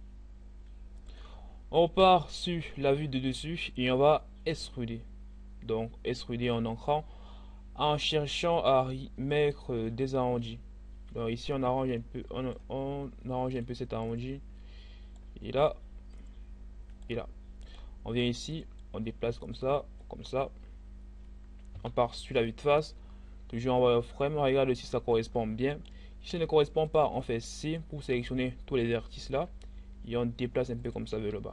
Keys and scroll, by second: 1.6 7, 4.6 e, 21.4 1, 25.9 c.